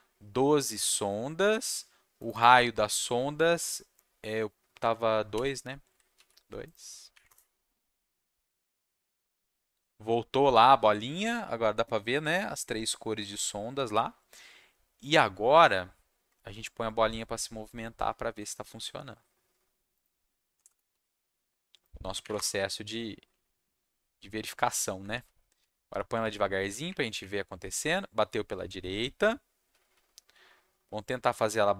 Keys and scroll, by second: 6.1 ctrl+s, 7.1 Up, 7.2 Return, 20.5 BackSpace, 20.6 BackSpace, 20.9 ctrl+s, 22.2 Up, 22.3 Return, 25.0 Down, 25.5 Down, 25.8 Down, 26.2 Down, 26.8 Up, 27.1 Up, 28.8-31.7 typing.